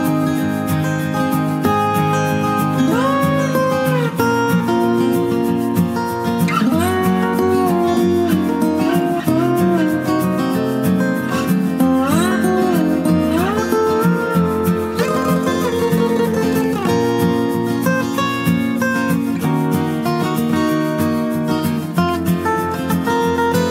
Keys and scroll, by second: 0.3 ], 15.6-17.0 typing, 22.1 ctrl+space.